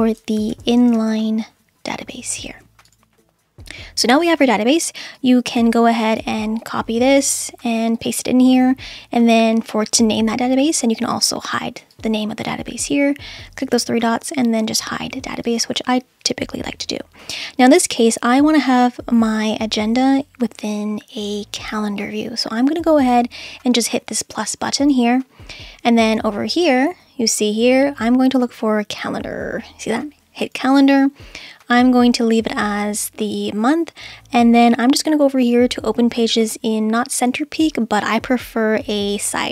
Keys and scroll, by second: 0.2-1.6 typing.